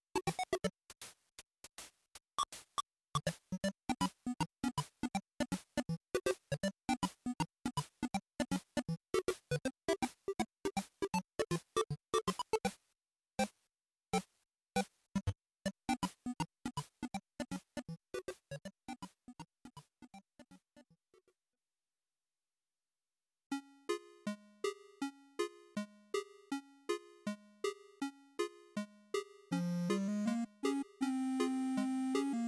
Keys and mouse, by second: 4.9-7.5 drag, 12.8-14.2 drag, 15.7-17.7 drag, 17.7 z, 19.5-25.9 drag, 26.4 ctrl+shift+click, 27.2 ctrl+t, 30.4-32.4 drag.